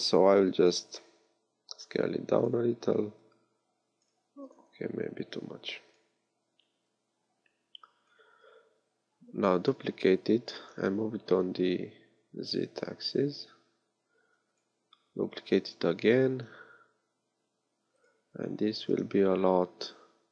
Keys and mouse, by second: 0.6 s, 4.3 s, 9.6 shift+d, 15.6 shift+d, 19.1 s.